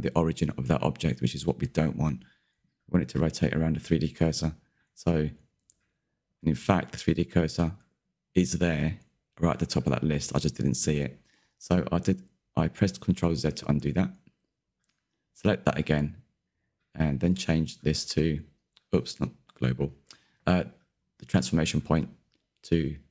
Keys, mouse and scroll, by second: 11.7 click, 12.2-13.9 middle drag, 13.9 ctrl+z, 14.2 ctrl+z, 15.9 click, 16.7 g, 19.2-20.4 drag, 20.4 middle click, 21.3 alt+d.